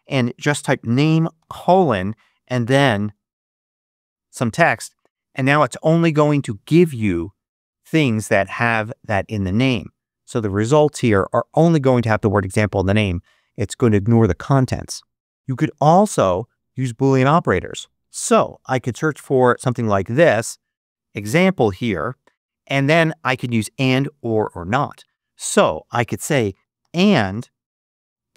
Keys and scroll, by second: 0.3-1.8 typing, 2.8-4.2 typing, 18.5-20.1 typing, 22.3 space, 26.3-28.0 typing.